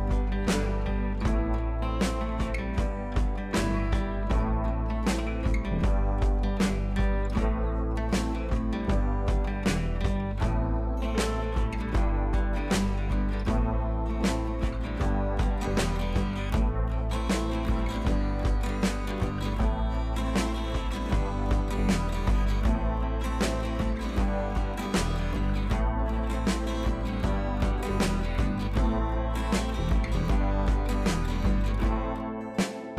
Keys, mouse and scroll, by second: 1.9-3.7 drag, 5.6-6.5 scroll up 1, 7.9-8.3 scroll down 1, 8.3 scroll up 1, 9.0 click, 14.2 click, 15.7 click, 15.9-16.5 scroll up 1, 16.5 click, 18.1 click, 19.9 ctrl+alt+shift+e, 20.9 click.